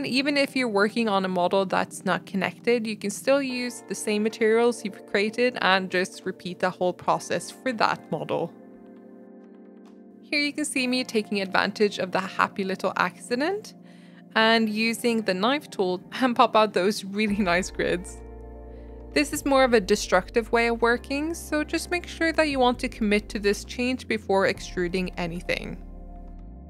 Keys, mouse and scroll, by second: 0.0 Tab, 0.5-2.0 typing, 0.7 click, 1.7 Tab, 1.9 Tab, 2.3 Tab, 2.6 Tab, 4.7 middle click, 4.9 Tab, 5.1 Tab, 5.2 g, 5.9 Tab, 6.0 middle click, 6.2 scroll down 1, 6.3 shift+middle click, 6.5 click, 6.6 middle click, 7.2 Tab, 7.6 click, 8.0 ctrl+click, 8.2 ctrl+click, 9.0 click, 9.2 a, 9.6 g, 9.9 click, 10.0 Tab, 10.2 scroll up 1, 10.4 Tab, 10.6 shift+middle click, 11.2 click, 11.4 scroll up 1, 11.6 shift+middle click, 12.3 click, 16.7-18.0 shift+middle drag, 18.0 click, 20.7 click, 21.0 shift+middle click, 21.8 shift+click, 22.1 alt+e, 22.7 Tab, 22.9 middle click, 23.1 scroll down 4, 23.4-24.8 middle drag, 24.8 ctrl+z, 24.9 ctrl+z, 25.4 ctrl+z, 25.7 shift+click, 25.9 alt+e, 26.3 Tab, 26.4-26.6 middle drag.